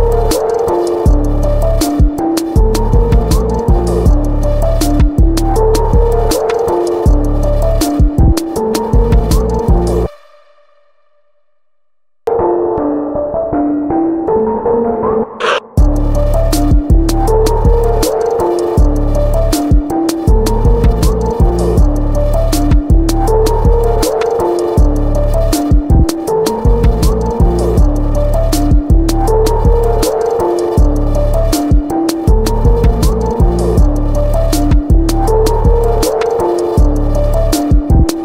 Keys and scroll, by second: 0.8 ctrl+s, 1.2 ctrl+c, 1.8 ctrl+shift+], 1.9 ctrl+shift+], 1.9 ctrl+shift+], 2.0 ctrl+t, 2.6 Return, 4.1 ctrl+c, 5.0 ctrl+v, 5.1 ctrl+t, 6.3 Return, 6.5 ctrl+h, 6.6 ctrl+j, 6.9 ctrl+s, 7.0 ctrl+t, 7.9 Return, 11.5-12.5 typing, 14.6 ], 14.9 ctrl+t, 17.1 [, 17.6 x, 19.6 ctrl+t, 20.9 Left, 21.0 Left, 21.0 Down, 21.0 Down, 21.1 Down, 21.2 Down, 21.4 Right, 21.6 Return, 22.2 space, 23.8 space, 25.3 ctrl+t, 25.8 Return, 29.8 space, 30.8 ctrl+z, 31.0 space, 32.3 ], 32.3 ], 32.3 ], 33.2 ctrl+z, 33.2 ctrl+z, 33.3 ctrl+z, 36.4 ctrl+j.